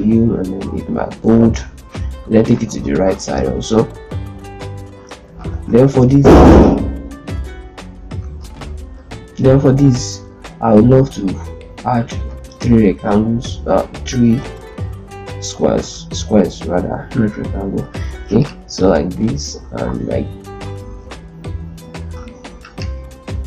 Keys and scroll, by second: 2.6 shift+r, 5.6 z, 8.2 ctrl+space, 14.2 ctrl+space, 19.6 ctrl+d, 20.4 ctrl+z, 20.6 ctrl+z.